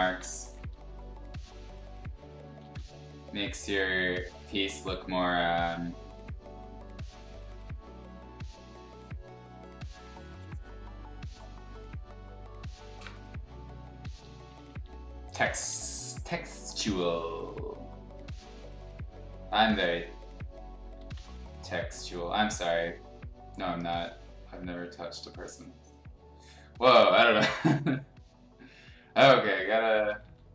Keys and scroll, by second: 0.4 ], 0.6 ], 2.6 ctrl+z, 13.9-15.7 typing, 21.0 ctrl+z, 27.1 ctrl+z, 29.1 ctrl+z, 30.2 ctrl+z.